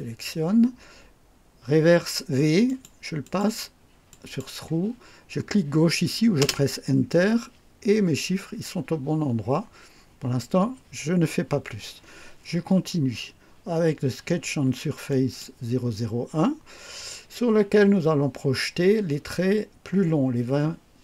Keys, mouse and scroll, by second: 2.7 click, 3.2 click, 4.1 click, 6.4 Return, 15.1 click.